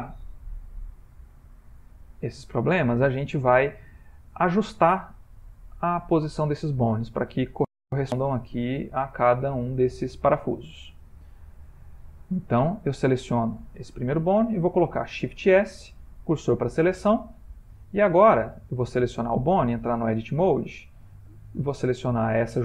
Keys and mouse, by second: 1.6 click, 5.5 shift+middle click, 7.3 ctrl+middle click, 7.8 shift+middle click, 8.6 ctrl+middle click, 9.4 middle click, 10.3 ctrl+middle click, 10.7 ctrl+middle click, 11.5 middle click, 13.2 click, 15.3 shift+s, 17.6 middle click, 18.9 click, 19.4 Tab, 20.3 click, 21.3-21.8 middle click, 21.3 middle click, 22.0 g.